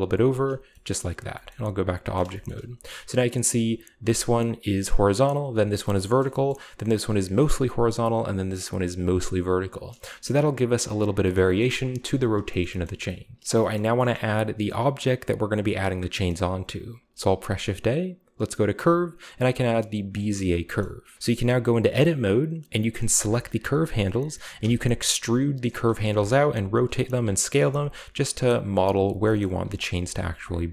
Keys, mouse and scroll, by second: 0.2 click, 0.5 Tab, 0.5-1.5 scroll down 1, 0.7-1.7 middle drag, 1.3 g, 1.7 drag, 2.6 a, 4.0 right click, 5.5 right click, 5.8-7.3 shift+middle drag, 6.0-7.3 shift+scroll up 2, 7.3-7.9 right drag, 9.0-10.0 right drag, 9.7 click, 11.3 shift+middle drag, 11.6-12.3 shift+middle drag, 12.3-13.1 scroll down 1, 12.6 shift+middle click, 12.8 middle drag, 12.8 a, 13.1-13.4 shift+scroll up 1, 14.4-16.1 shift+scroll down 1, 16.3 middle click, 17.0 shift+a, 20.1 click, 20.6-21.4 scroll down 1, 20.7-21.7 middle drag, 20.7 right click, 21.2 Tab, 22.8-24.6 right drag, 23.1 g, 24.6 e, 25.7 click, 26.4 r, 26.9-28.7 drag, 27.0 s, 27.6 g, 28.2-29.4 right drag, 28.9-30.7 typing, 29.0 click, 29.4-30.1 scroll up 1, 30.1 click, 30.5 click.